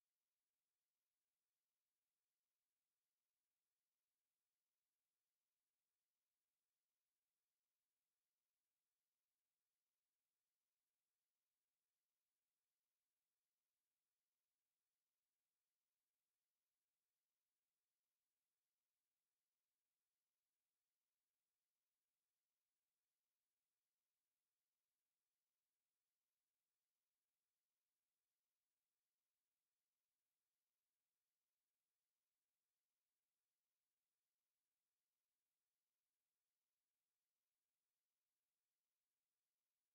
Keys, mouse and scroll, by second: 0.0 click, 2.3 click, 7.3 click, 10.4-11.7 middle drag, 11.7-12.1 scroll up 1, 12.2-12.5 scroll down 1, 13.7 click, 15.4 click, 23.7 click, 25.7-26.8 middle drag, 26.9-27.3 scroll up 1, 27.5 scroll up 1, 28.0-29.3 middle drag, 29.5 scroll up 1, 33.2-33.9 drag, 38.4-39.9 typing.